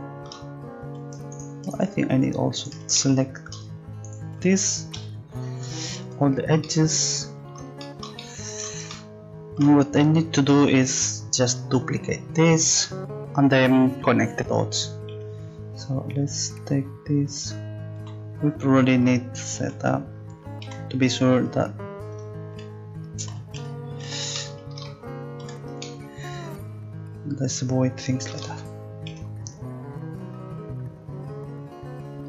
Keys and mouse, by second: 1.3-3.0 right drag, 3.5-4.5 middle drag, 5.0 x, 15.1 c, 19.6 z, 20.6 c, 25.4 a, 29.1 c.